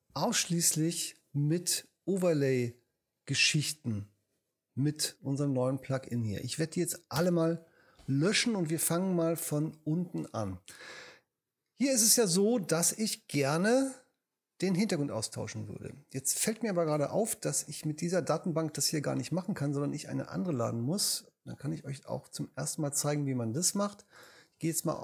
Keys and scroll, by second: 7.2 shift+BackSpace, 8.0 BackSpace.